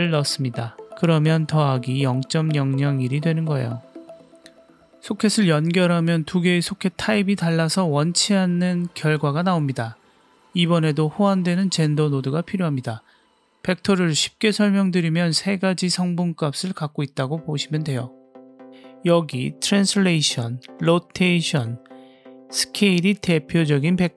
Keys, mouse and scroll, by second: 4.8 click, 5.8-7.0 drag, 7.5 middle click, 7.9 scroll down 1, 8.3-9.3 middle drag, 10.1 shift+middle click, 10.6-12.4 middle drag, 14.0 ctrl+right click, 14.8 drag, 15.4 click, 16.1 click, 17.9-19.1 middle drag.